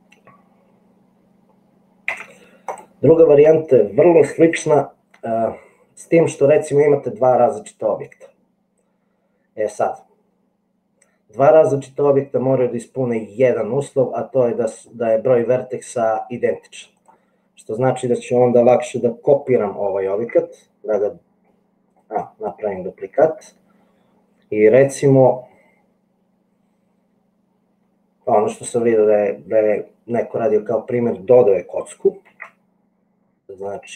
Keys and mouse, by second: 2.2 x, 20.5 shift+d, 32.5 shift+a.